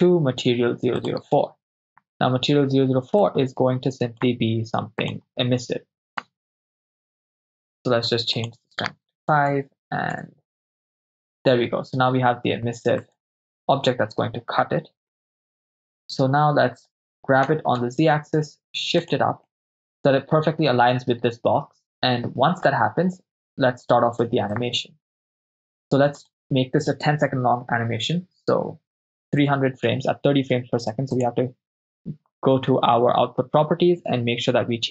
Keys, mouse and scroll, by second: 3.3-4.3 drag, 5.0 click, 8.4-10.3 drag, 13.3 right click, 15.2 KP_0, 17.5 g, 17.8 z, 19.1 ctrl+click, 19.6-20.8 middle drag, 21.9-22.7 middle drag, 24.5-25.5 drag, 26.2-29.5 drag, 31.1 click.